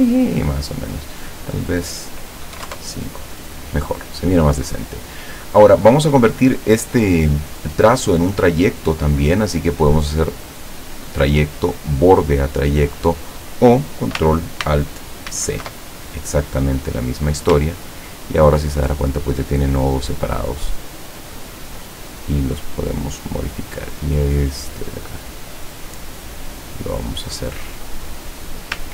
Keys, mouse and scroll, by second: 1.5 click, 2.6 KP_5, 2.7 KP_Enter, 4.2 click, 7.3 click, 10.0 click, 13.3 click, 15.4 ctrl+alt+c, 17.1 click, 17.8-18.3 ctrl+scroll up 2, 20.3-22.6 drag, 23.2 click, 23.9-26.9 drag, 27.1-27.7 scroll up 2, 28.1 scroll down 2.